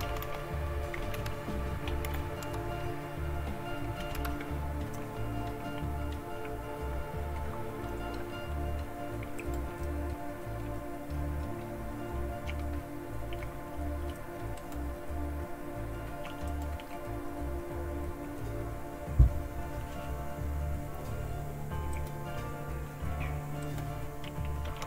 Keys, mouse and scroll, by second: 0.0-1.9 typing, 2.2 Tab, 4.0 Return, 9.4 click, 14.6 click, 16.5 click, 16.9 click, 21.9-23.4 drag, 23.6 click, 24.4-24.8 typing.